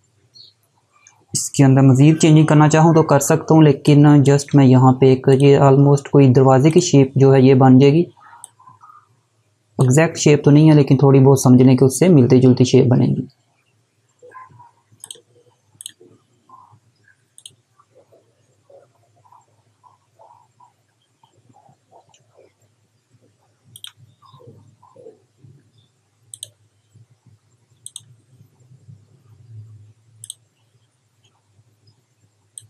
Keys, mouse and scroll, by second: 3.0 space, 3.4 click, 3.5 space, 4.9 click, 11.7 Left, 14.6 click, 23.3 click, 25.9 click, 29.8 click, 32.1 click.